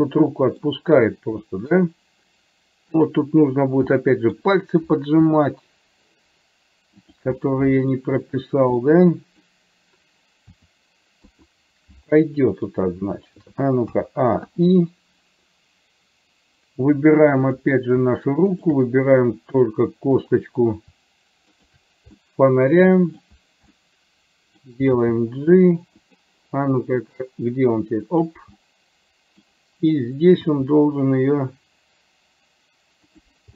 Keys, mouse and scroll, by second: 0.2 middle click, 1.5 middle click, 3.2 click, 4.0 middle click, 5.5 r, 7.4 middle click, 9.0 middle click, 10.7 r, 12.2-13.3 middle drag, 14.0 a, 14.7 i, 17.7 click, 18.7 shift+click, 20.2 click, 22.3-23.3 middle drag, 23.9 middle click, 25.2 g, 27.3-28.5 drag, 28.7 middle click, 30.5 r.